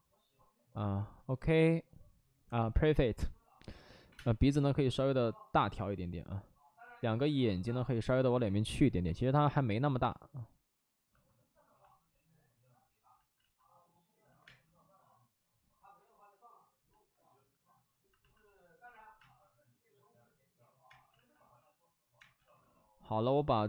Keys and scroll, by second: 4.0 3, 4.1 space, 6.8 ctrl+z, 6.8 3, 9.9 ctrl+z, 13.3 ctrl+z, 14.2 ctrl+z, 14.4 space, 19.1 space, 20.8 space, 21.0 ctrl+z, 22.1 space, 22.3 ctrl+z.